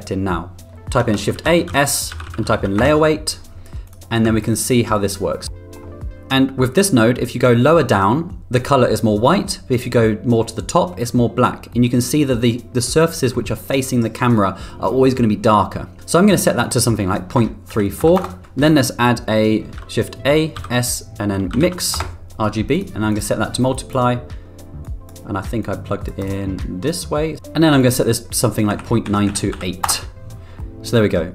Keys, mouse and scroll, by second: 1.4 shift+a, 4.4 ctrl+click, 4.5 ctrl+click, 5.0 middle click, 6.3-7.6 middle drag, 9.5-10.9 middle drag, 11.4 middle click, 14.7-16.0 middle drag, 16.7-18.4 drag, 20.1 shift+a, 23.1-23.9 drag, 25.0 click, 25.7 click, 26.6-27.4 drag, 28.0-30.3 drag, 30.6 middle click.